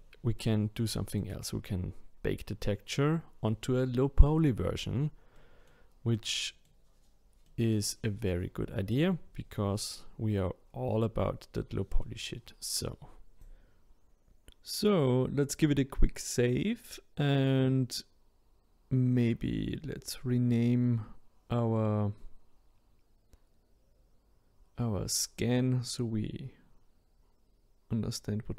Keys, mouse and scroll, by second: 0.8-3.8 middle drag, 5.3-8.9 middle drag, 8.9 click, 9.9 scroll down 1, 10.4 scroll up 2, 12.0-13.4 middle drag, 14.0-17.0 drag, 19.1 click, 19.3-22.4 drag.